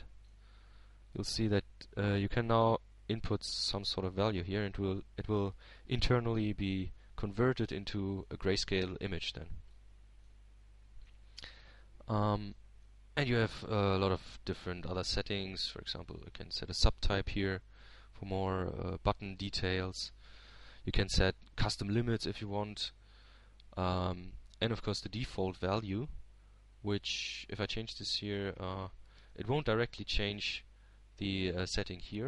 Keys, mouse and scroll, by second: 0.4-1.6 middle drag, 2.5 shift+Tab, 3.3-4.7 shift+middle drag, 5.6-8.8 drag, 8.9-9.9 drag, 9.9 shift+Tab, 11.3-12.7 shift+middle drag, 13.0 click, 13.9-15.1 middle drag, 15.5-18.3 middle drag, 19.7 click, 30.6-32.2 drag.